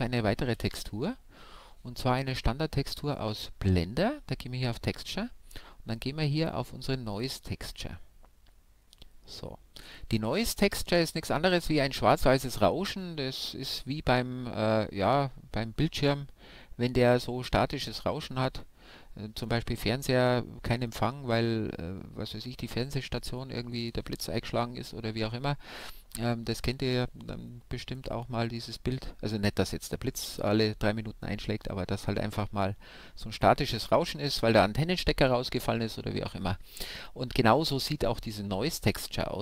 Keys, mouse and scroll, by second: 0.6 shift+a, 9.9-11.9 drag.